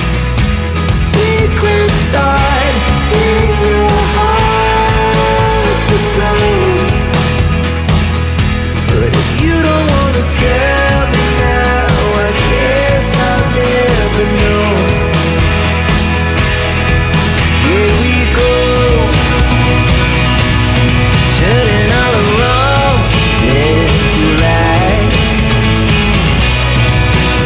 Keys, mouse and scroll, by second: 3.0 click, 3.1 double click, 4.4-7.1 scroll down 1, 8.0 click, 8.1 double click, 11.5 click, 12.7 right click, 14.8 click, 17.3 click, 19.0 click, 25.3 click, 26.3 shift+click.